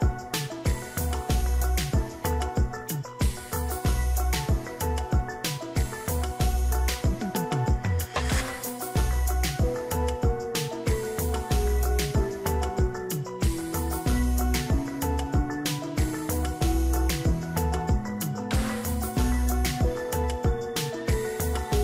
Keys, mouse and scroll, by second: 2.0 ctrl+t, 2.8 shift+click, 7.4 ctrl+j, 8.2 ctrl+click, 13.9 ctrl+t, 14.6 shift+click, 19.7 ctrl+j, 20.4 ctrl+click.